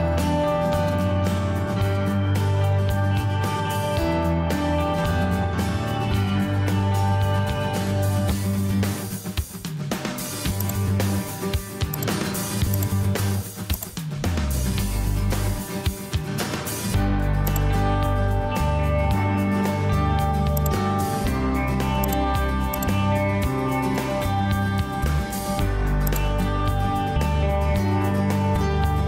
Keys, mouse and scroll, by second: 4.4 ctrl+1, 16.1 ctrl+space.